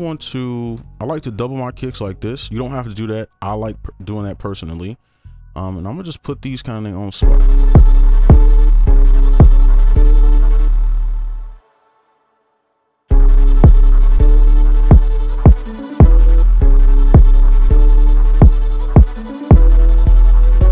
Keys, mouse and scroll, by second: 0.7 ctrl+a, 1.2 shift+click, 2.3 right click, 5.5 right click, 7.2 space, 8.6 right click, 8.6 space, 8.8 space, 9.2 right click, 10.8 space, 10.9 ctrl+click, 11.7 shift+click, 14.0 right click, 16.5 space, 17.1 right click, 18.3 ctrl+click, 19.1 shift+click.